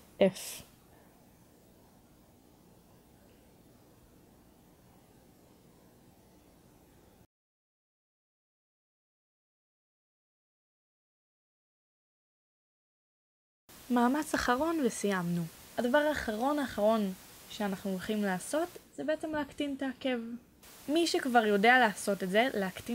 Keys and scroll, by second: 1.1 f, 4.2 a, 6.1 f, 7.2 Caps_Lock, 9.7 f, 11.2 Caps_Lock, 13.4 f, 18.4 1, 20.3 3.